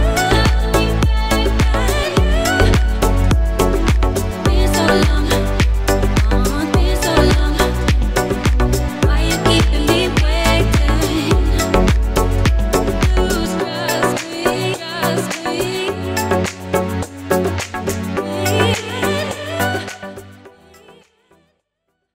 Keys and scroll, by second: 3.0 Tab.